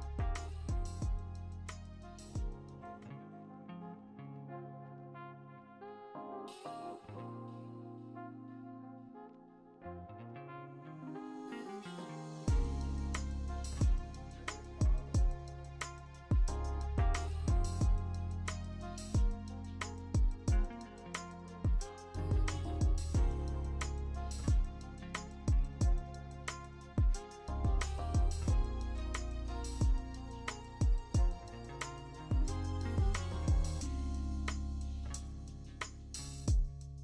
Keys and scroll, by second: 0.0 ctrl+i, 0.1 b, 1.1 ctrl+z, 1.1 x, 3.8 3, 7.1 v, 12.0 ctrl+alt+g, 13.5 ctrl+alt+g, 17.1 ctrl+i, 17.8 b, 20.2 w, 21.8 b, 23.7 ctrl+z, 23.8 ctrl+z, 24.0 1, 26.3 ctrl+alt+z, 26.5 ctrl+alt+z, 28.1 ctrl+alt+z, 29.1 ctrl+d, 33.1 ctrl+shift+i, 33.5 ctrl+shift+i, 33.6 alt+BackSpace, 33.6 x, 34.1 ctrl+shift+u, 34.2 ctrl+shift+i, 34.4 x.